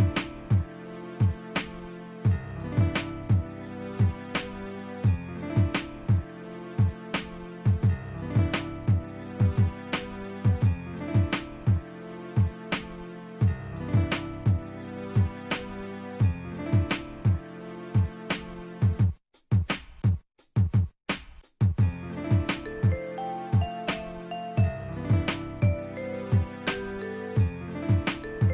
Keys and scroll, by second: 3.7 ctrl+z, 4.4 scroll down 1, 4.6 scroll up 1, 11.0 scroll down 1, 11.2 scroll up 1, 11.7 scroll down 1, 11.9 scroll up 1, 13.5 scroll down 1, 13.6 scroll up 1, 14.6 scroll down 1, 19.6 scroll down 1, 19.7 scroll up 1, 21.6 scroll down 1, 26.6 scroll down 1, 26.7 scroll up 1.